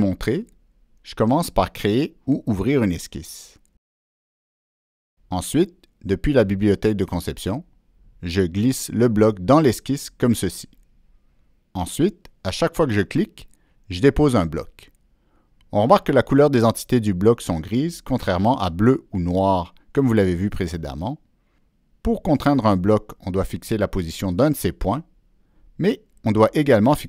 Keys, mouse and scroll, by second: 0.8 click, 1.6 click, 7.8 click, 9.5 click, 10.8 click, 12.5 click, 14.0 click, 15.2 click, 22.1 middle click, 24.3-26.2 drag, 26.9 Escape, 26.9 click.